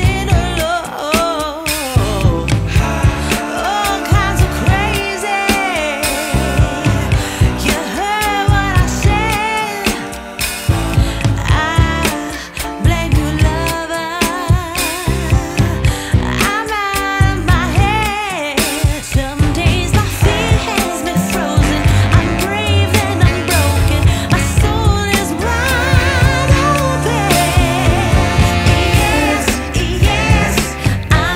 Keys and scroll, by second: 5.2 space, 7.6 F4, 7.9 Escape, 9.7 shift+F2, 10.4 shift+Page_Down, 18.1 Escape, 23.5 Escape.